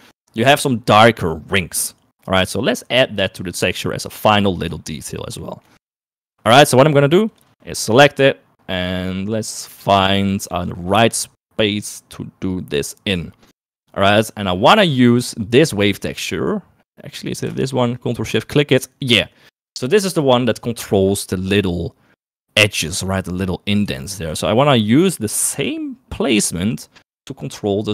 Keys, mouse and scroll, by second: 3.1 middle click, 4.4 shift+middle click, 5.0 shift+middle click, 5.8 shift+middle click, 6.5 shift+middle click, 7.4 click, 14.1 middle click, 15.6 click, 17.0 middle click, 18.3 ctrl+shift+click, 24.4 shift+middle click.